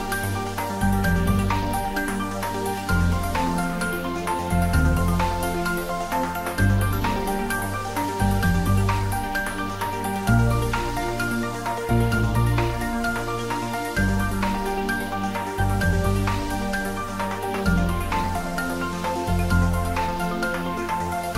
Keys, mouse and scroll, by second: 0.5 i, 1.6 click, 1.8 s, 3.3 x, 6.1 click, 6.4-8.0 ctrl+middle drag, 7.8-8.7 typing, 8.7 click, 9.0 ctrl+middle click, 9.5 shift+middle click, 10.6 e, 14.2 click, 14.3 Tab, 15.2 ctrl+r, 16.9 click, 17.3 ctrl+z, 17.7-19.6 middle drag, 19.6 click, 20.4 2, 20.6 click, 21.1 middle click.